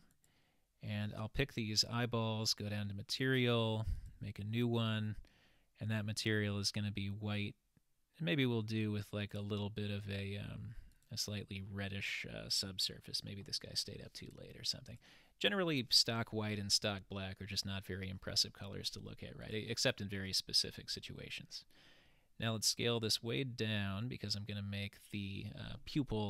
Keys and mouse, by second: 2.5 click, 4.1 click, 7.4-8.4 drag, 14.9 click, 19.5 click.